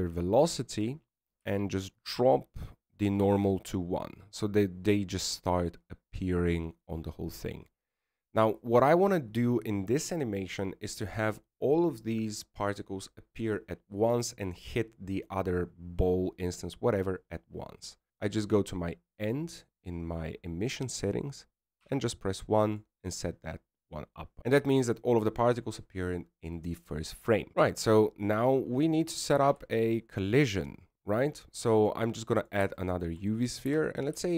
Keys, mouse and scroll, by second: 0.8 click, 3.4 click, 21.2 click, 27.5 middle click, 28.8 alt+a, 29.4 KP_1, 31.5 shift+a.